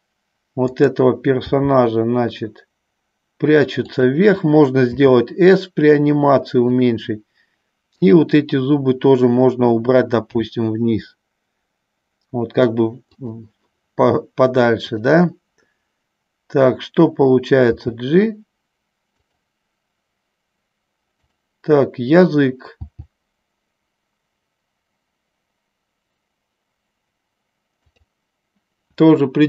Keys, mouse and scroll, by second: 0.9-2.2 drag, 2.2 g, 4.2 click, 5.2 s, 8.0-9.2 drag, 15.0-16.1 drag, 21.3 click, 23.1 g, 28.2 click.